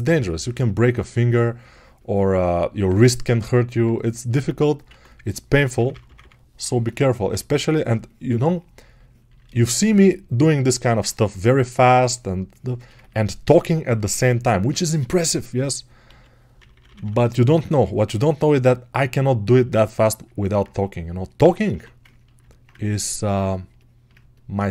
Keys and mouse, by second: 0.0-9.2 alt+right drag, 17.7-24.7 ctrl+alt+right drag.